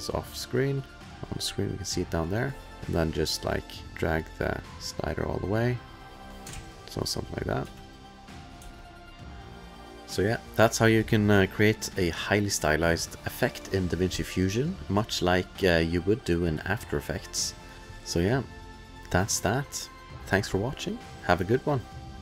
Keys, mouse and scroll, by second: 2.0 click, 3.6 click, 3.9 ctrl+z, 4.1 click, 7.0 ctrl+s, 7.0 click, 7.7 space, 8.6 space, 9.1 click.